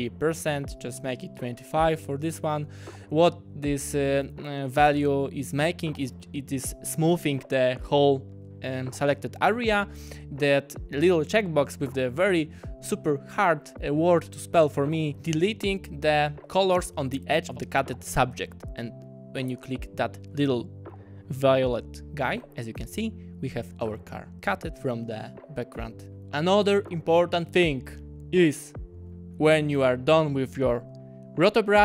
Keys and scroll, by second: 0.5-1.5 typing, 16.5 `.